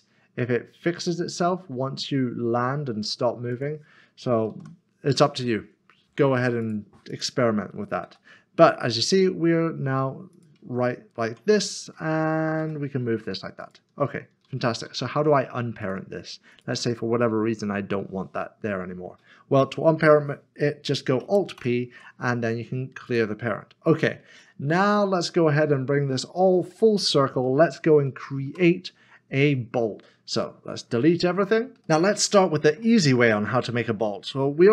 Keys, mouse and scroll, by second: 3.5 g, 3.5 click, 4.5 ctrl+z, 6.6 click, 7.1 double click, 8.0 g, 10.3 click, 12.6 g, 13.6 g, 14.1 ctrl+z, 15.8 click, 21.6 alt+p, 24.2 click, 25.1 shift+middle click, 25.9-27.4 scroll down 1, 27.5 middle click, 28.9 scroll up 1, 30.4 click, 31.7 Delete, 31.9 middle click, 32.8 shift+middle click.